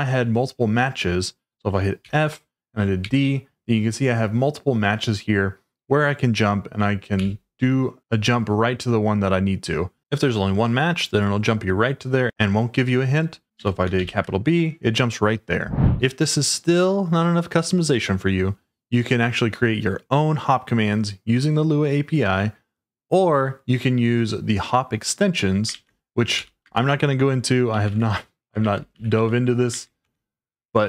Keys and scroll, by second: 2.0 f, 3.0 d, 7.1 t, 13.6 f, 13.9 shift+b, 15.4-16.1 typing, 25.7-30.5 typing.